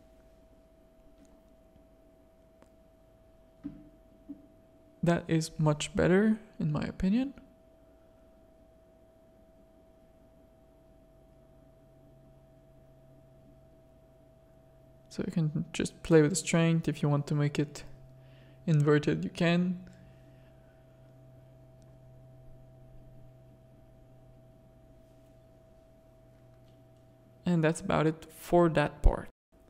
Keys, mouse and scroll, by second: 3.4-4.3 drag, 4.8 click, 5.8-6.4 drag, 6.6 z, 6.8 click, 7.3 z, 7.6 drag, 8.3-10.1 middle drag, 10.5-12.8 middle drag, 13.1 middle click, 14.3-18.8 drag, 19.9 click, 20.4 middle click, 20.8 click, 20.9 middle click, 21.0 click, 21.5 z, 23.9-28.2 middle drag.